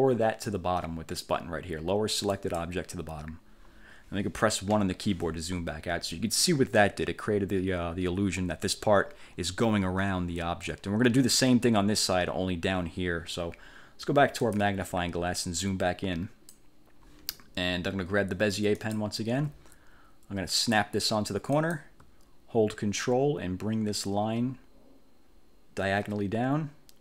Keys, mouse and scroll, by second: 2.4 click, 4.8 1, 14.6 click, 15.8 click, 18.9 click, 21.6 click.